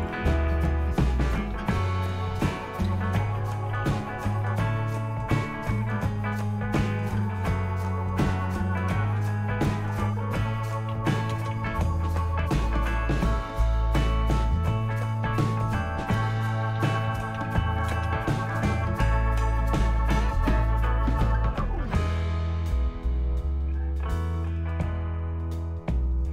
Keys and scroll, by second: 0.0-4.8 typing, 2.1 Return, 5.4 Return, 10.7-12.4 typing, 12.6 Return, 16.5-18.9 typing.